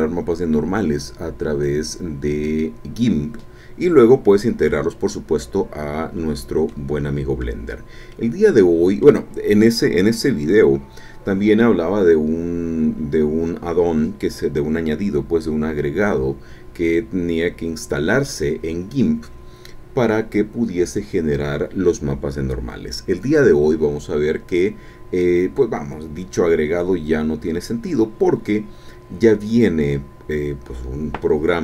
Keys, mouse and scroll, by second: 6.7 click, 7.7 scroll down 2, 8.1-9.2 drag, 9.2-9.6 scroll up 2, 10.0-10.3 scroll up 2.